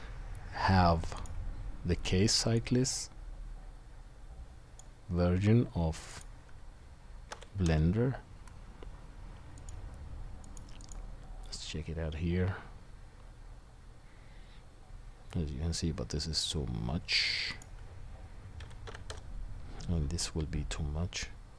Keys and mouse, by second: 11.6-12.8 middle drag, 17.6-21.5 drag, 17.6-21.5 middle drag.